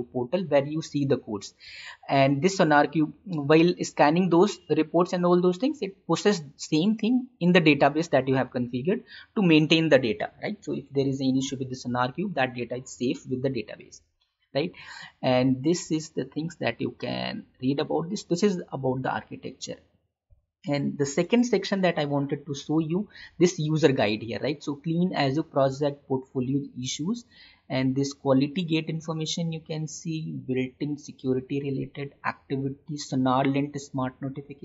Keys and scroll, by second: 20.2 ctrl+-.